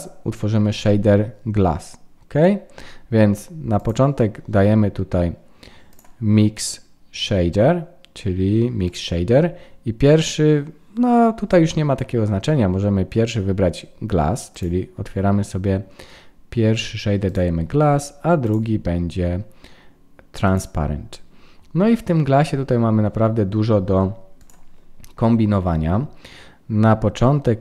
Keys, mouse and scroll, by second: 3.7 click, 5.9 click, 14.5 click, 18.4 click, 24.4 click.